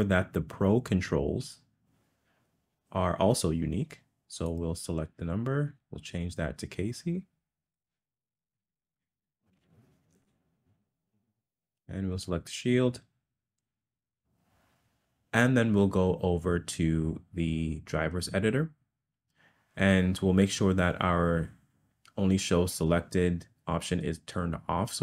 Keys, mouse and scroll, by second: 4.4 click, 5.7-10.2 drag, 12.3 click.